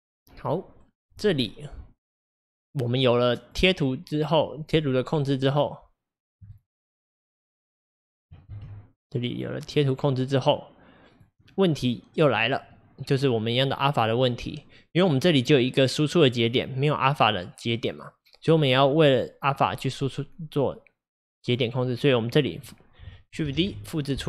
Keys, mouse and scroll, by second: 8.6 ctrl+z, 9.4 click, 9.9-23.6 drag, 23.6 shift+d.